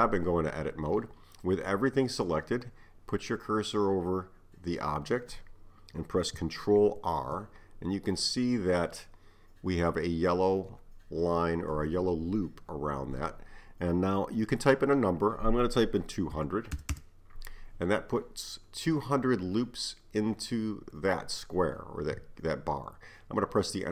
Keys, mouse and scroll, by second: 0.0 Tab, 7.0 ctrl+r.